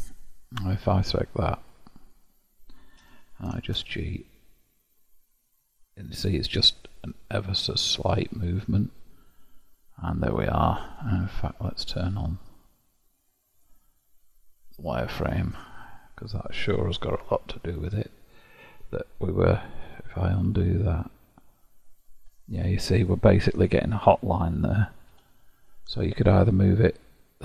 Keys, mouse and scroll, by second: 1.5 click, 2.1 click, 3.1 g, 8.9-9.7 scroll up 1, 9.7-12.0 middle drag, 12.0-15.4 drag, 15.4-17.2 middle drag, 17.2 KP_7, 17.9-19.4 shift+middle drag, 19.4-20.5 scroll up 1, 20.5 ctrl+z, 25.1 g.